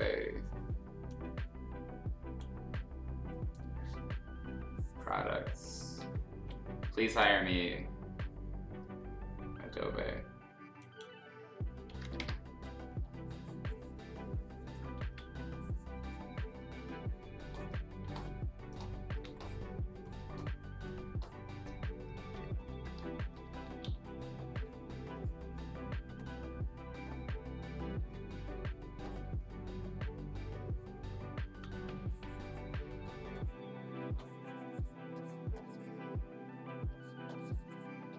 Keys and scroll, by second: 6.0 ctrl+z, 7.2 3, 15.0 ctrl+z, 18.0 x, 19.2 x, 22.2 z, 23.0 space, 23.5 b, 23.9 x, 26.0 x, 28.0 ctrl+z, 31.4 ctrl+z, 34.0 x.